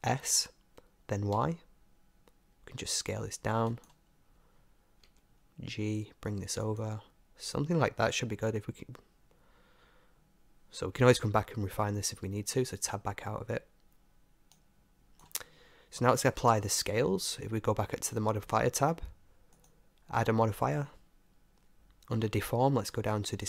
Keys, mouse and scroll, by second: 0.2 s, 4.1-6.0 middle drag, 5.1 g, 6.0-7.1 drag, 7.1-12.2 middle drag, 12.2 Tab, 14.6-16.5 drag, 16.5-17.5 middle drag, 19.6-21.4 drag.